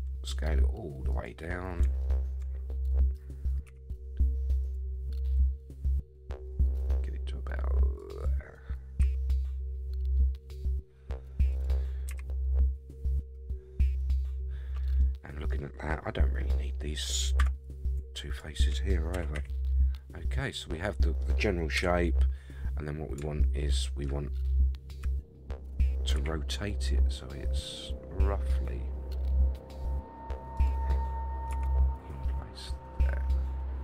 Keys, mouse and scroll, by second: 1.4-1.7 scroll up 4, 2.0 shift+middle click, 3.6 g, 5.3 s, 9.0 g, 12.2 s, 14.8 middle click, 17.4 3, 17.6 click, 18.3 shift+click, 19.1 x, 19.8-20.1 scroll down 3, 20.1-21.2 middle drag, 21.7 KP_3, 22.8 scroll up 2, 23.4 shift+middle click, 25.0 a, 26.1 r, 31.5 g.